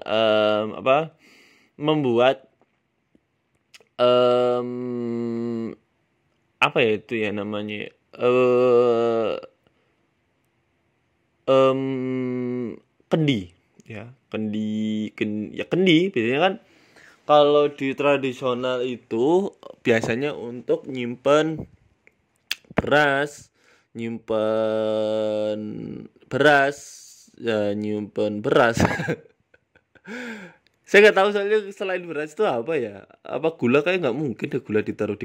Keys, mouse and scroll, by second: 0.5 click, 1.6 s, 4.0 g, 5.1 e, 5.8 s, 6.6 click, 7.1 s, 7.8 g, 9.1 shift+middle click, 10.3 click, 10.8 g, 11.8 click, 12.3 g, 13.7 click, 14.1 d, 14.6 s, 15.5 click, 16.1 ctrl+b, 17.5 s, 18.1 ctrl+b, 21.9 Tab, 22.3 middle click, 23.8 KP_1, 24.3 shift+middle click, 24.6 Tab, 24.9 shift+middle click, 25.3 click, 25.8 scroll down 2, 25.8 scroll up 5, 26.0 shift+middle click, 26.5 e, 26.8 s, 28.1 e, 29.9 middle click, 30.8 e, 31.2 s, 32.7 ctrl+r, 34.1 KP_1, 34.7 g.